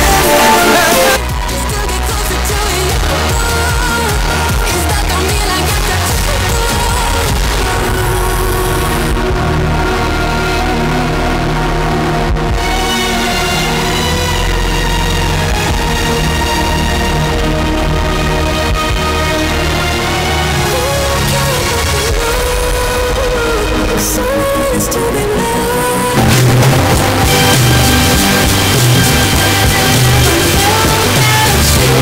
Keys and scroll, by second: 1.1 Page_Down.